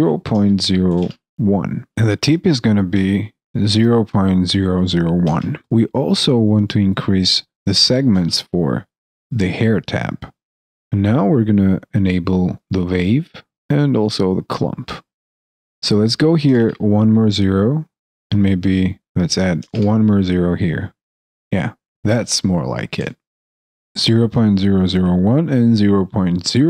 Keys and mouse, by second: 23.3 alt+click.